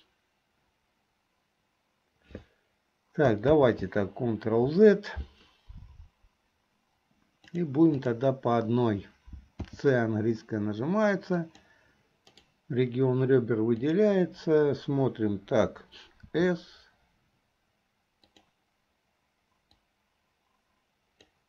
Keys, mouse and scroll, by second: 3.6 ctrl+z, 7.7 click, 8.1 click, 9.6 c, 14.2 click, 16.3 s, 19.9-21.4 drag.